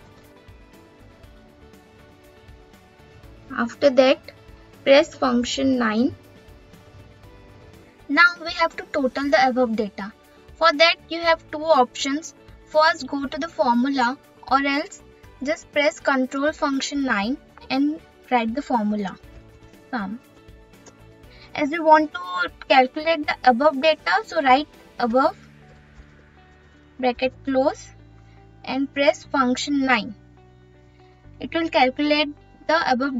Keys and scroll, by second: 4.8 F9.